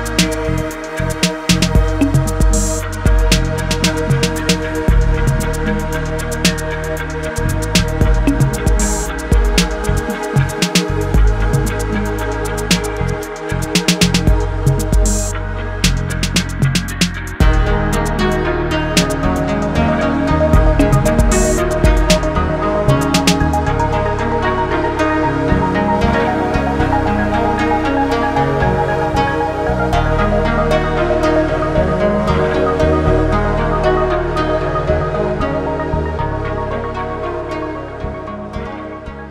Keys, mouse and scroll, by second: 0.7 click, 1.9 ctrl+a, 6.2 click, 7.4-10.5 drag, 11.8 click, 13.2 drag, 13.7 scroll down 3, 14.4-14.9 drag, 14.9 scroll down 2, 15.7-18.8 drag, 22.4-24.6 drag, 24.6-26.1 middle drag, 26.1 click, 27.6 g, 34.7 click, 36.2-39.3 drag.